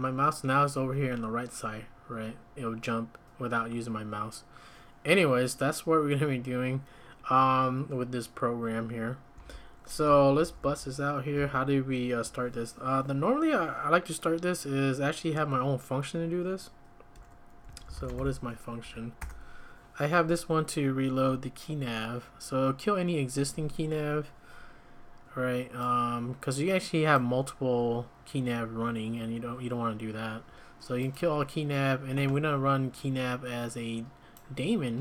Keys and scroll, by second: 9.3 `, 10.4 ctrl+a, 10.6 ctrl+a, 17.4-18.6 typing, 18.8 Up, 19.2 Return.